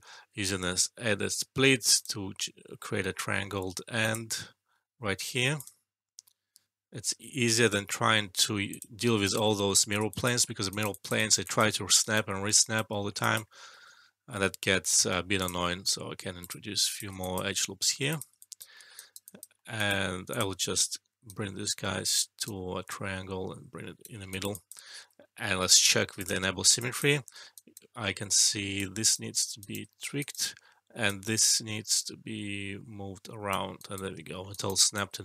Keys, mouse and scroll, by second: 1.0-1.7 typing, 1.9 click, 8.6 click, 9.2 alt+right click, 10.0 alt+click, 10.4 alt+middle click, 10.6 alt+right click, 10.9 alt+click, 11.1 alt+right click, 11.4 alt+click, 11.7 alt+middle click, 11.9 alt+right click, 12.3 alt+middle click, 13.1 alt+click, 13.4 alt+middle click, 15.3 click, 16.4 ctrl+click, 18.7 alt+middle click, 18.9 alt+right click, 19.2 alt+click, 19.5 alt+middle click, 19.7 alt+right click, 20.3 click, 21.2-21.8 right drag, 24.5 alt+click, 24.8 alt+middle click, 25.6 shift+s, 26.1 click, 26.8 alt+click, 27.3 alt+middle click, 27.5 alt+right click, 27.9 alt+middle click, 28.7-29.3 right click, 29.9 alt+middle click, 30.1-33.5 alt+right drag, 34.2 alt+middle click, 34.5 alt+right click, 34.7 alt+click, 35.1 alt+middle click.